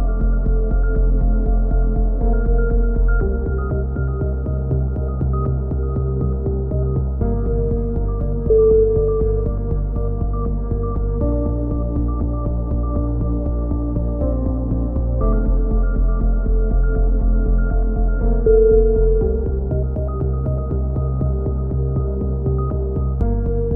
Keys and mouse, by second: 0.2 middle click, 0.2 g, 2.0-3.0 drag, 2.7 g, 5.7 a, 6.0 z, 6.5-7.5 middle drag, 7.2 z, 7.7 click, 9.2 a, 9.4 z, 10.3 click, 13.5 middle click, 13.9 KP_6, 14.5 KP_7, 16.6-17.7 drag, 17.5 z, 18.1 b, 19.7 a, 20.1 z, 20.4-21.5 drag, 20.5 KP_3, 22.3 Tab.